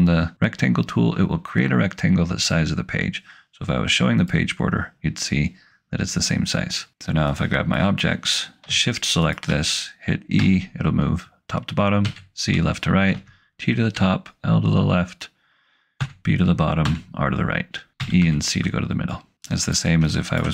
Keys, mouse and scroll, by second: 4.2 click, 7.4 click, 9.3 shift+click, 10.4 e, 11.9 c, 13.1 t, 13.8 l, 16.0 b, 16.7 r, 18.0 e, 18.2 c, 19.4 click.